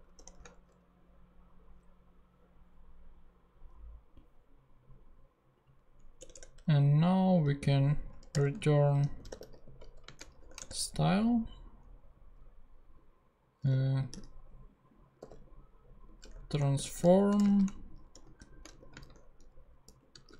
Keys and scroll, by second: 0.1 shift+super+p, 6.3 Return, 7.5 e, 7.7 t, 8.3 Return, 8.9 super+Return, 9.0 super+z, 9.1-10.3 typing, 10.5 shift+Return, 13.7 t, 14.1 a, 15.3-20.3 typing.